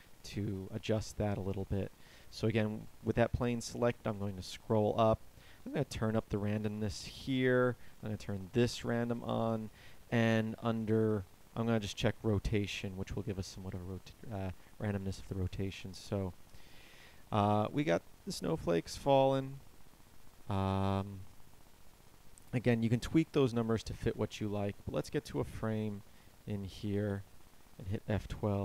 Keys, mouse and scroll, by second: 0.0 Escape, 15.5 alt+a, 24.9 Escape.